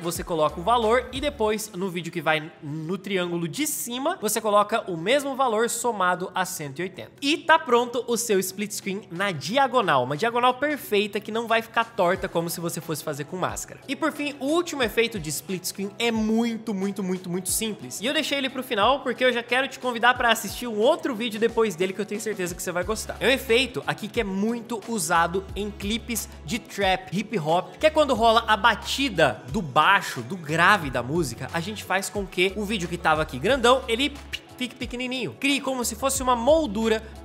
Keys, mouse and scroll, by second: 8.9 space, 35.9 space.